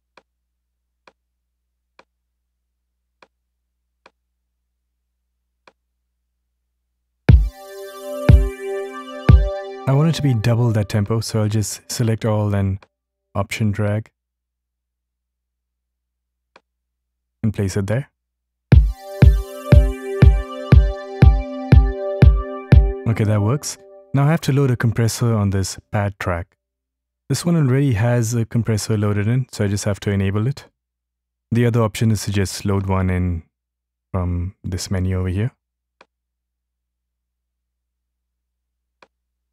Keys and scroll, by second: 6.4 ctrl+alt+Left, 15.0 ctrl+alt+Right.